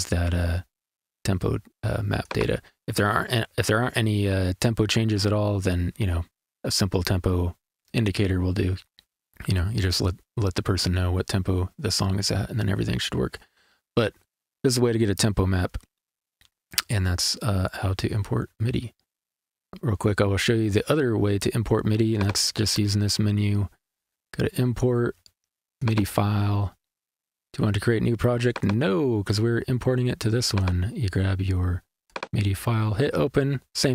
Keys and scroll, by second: 19.9 super+z.